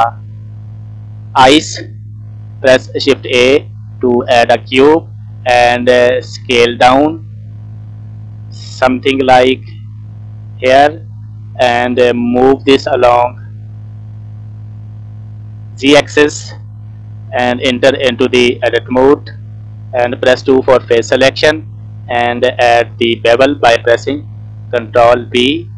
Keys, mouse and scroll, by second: 0.1 middle click, 1.2 shift+middle click, 2.8 shift+a, 5.4 s, 7.2 middle click, 7.6 scroll up 3, 8.0 middle click, 9.4 s, 10.8-11.5 scroll down 4, 10.9 middle click, 12.3 g, 14.4-15.7 middle drag, 17.0 scroll up 2, 17.3 scroll down 2, 18.1 Tab, 18.5 middle click, 19.2-19.9 scroll up 2, 20.3 2, 20.9 middle click, 21.7 scroll down 1, 24.2 ctrl+b.